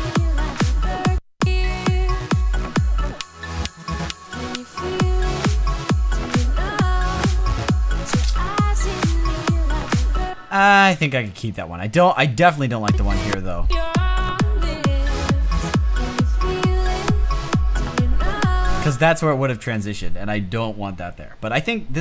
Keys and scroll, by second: 10.2 space, 18.8 space.